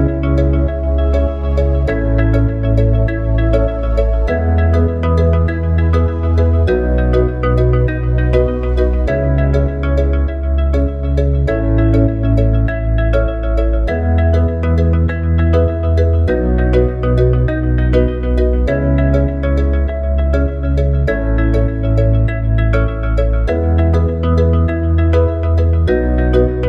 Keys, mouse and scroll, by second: 0.4 click, 2.4 s, 5.4 click, 6.3 s, 11.5 click, 12.6 shift+click, 13.2 click, 15.2 ctrl+v, 16.2 click, 21.0 click, 21.6 click, 24.1 click, 25.8 click.